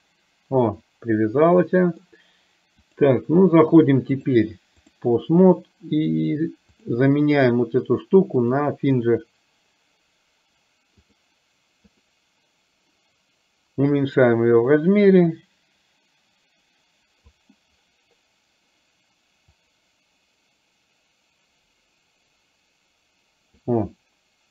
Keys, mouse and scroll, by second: 1.7-2.2 middle drag, 4.2 click, 6.9 click, 8.7-11.3 drag, 12.0 click, 14.0-17.5 drag, 19.7-23.8 drag.